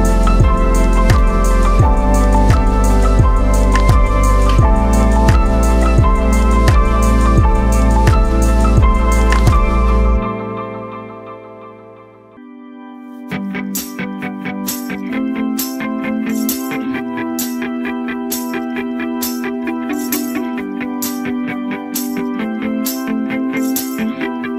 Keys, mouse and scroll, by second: 4.1 click, 6.2 scroll down 1, 6.9 v, 7.3-12.5 drag, 15.5 scroll up 1, 16.3-23.9 drag.